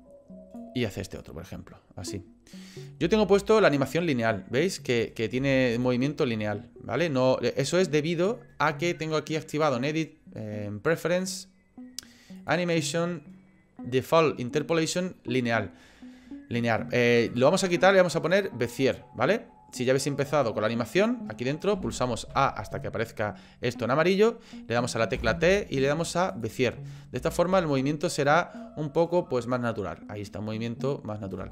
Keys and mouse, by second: 0.6 click, 2.7 click, 3.0 space, 5.4 space, 5.8-7.8 drag, 9.5-11.1 drag, 21.8 a, 22.0 a, 22.3 a, 25.2 t, 27.2 space.